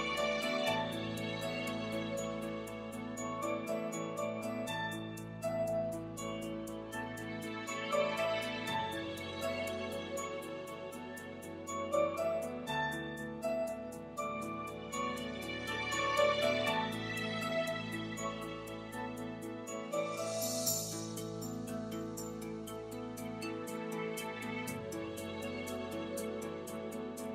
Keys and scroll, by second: 3.7 super+s.